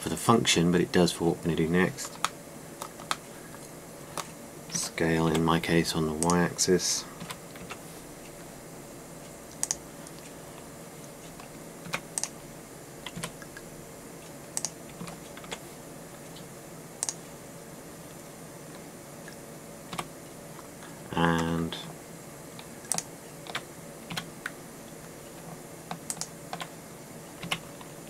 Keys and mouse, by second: 0.0 s, 2.1 middle click, 4.0 middle click, 5.4 s, 7.9 s, 12.5 e, 15.2 e, 15.2 s, 15.3-17.2 drag, 15.6 s, 18.8-20.6 drag, 20.6 f, 23.6-24.8 middle drag, 24.8 f.